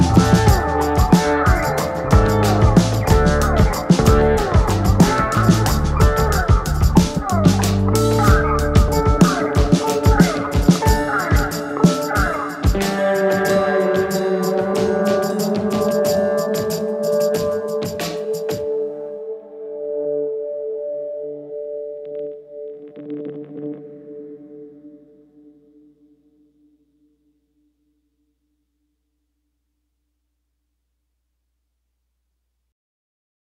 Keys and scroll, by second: 4.6 c, 10.1 ctrl+k, 16.9 ctrl+g, 17.6 c, 23.4 shift+F2, 23.4 F9, 31.5 F3, 32.2 ctrl+s.